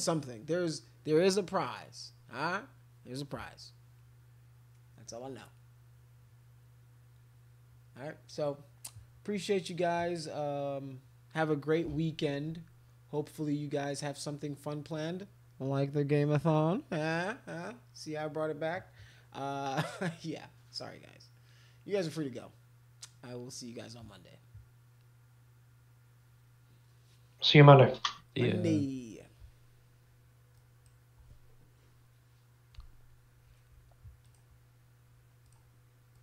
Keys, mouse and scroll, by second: 30.6 click, 34.3 click, 35.4 click, 36.1 click.